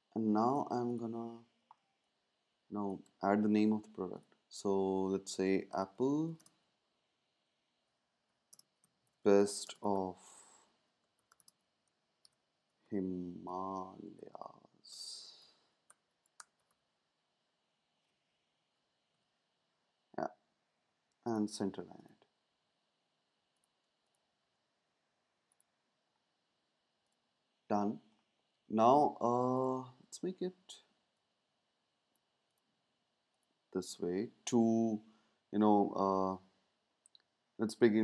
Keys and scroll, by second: 5.5-6.7 typing, 8.4-17.1 typing, 18.6 Left, 19.1 typing.